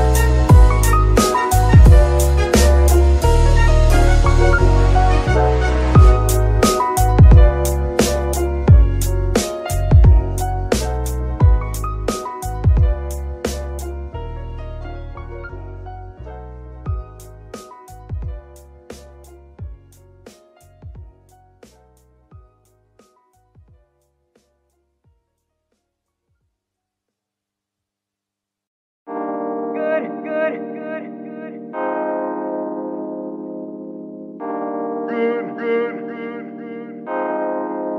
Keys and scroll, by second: 28.5 g.